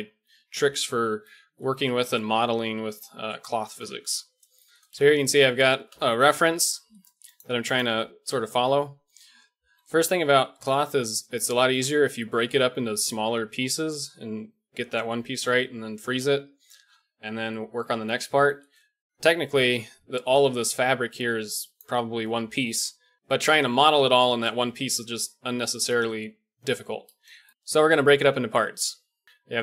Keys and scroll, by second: 3.7 KP_1, 4.0 a, 5.8 KP_1, 8.4 h, 9.6 alt+h, 10.3 a, 19.8-23.1 d, 28.6 d, 29.2 d, 29.3 d.